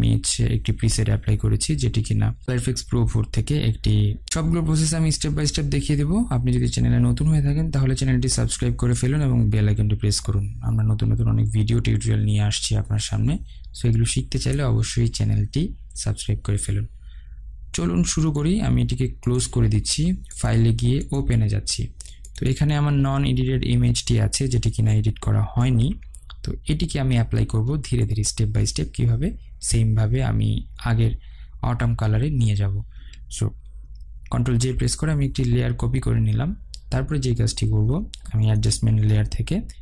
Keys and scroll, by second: 25.3 ctrl+0, 34.1 ctrl+j.